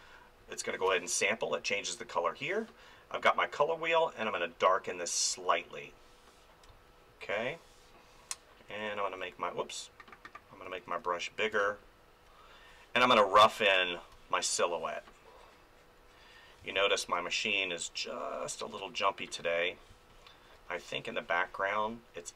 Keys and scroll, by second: 6.7 space, 8.6 ctrl+=, 9.1 ctrl+-, 9.5 ctrl+=, 11.5 space, 14.1 space, 16.6 space, 19.9 space.